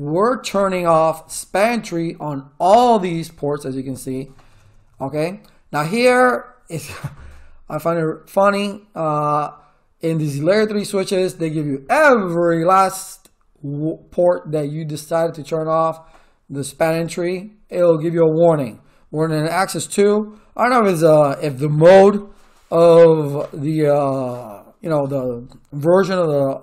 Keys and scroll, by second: 3.5 Return.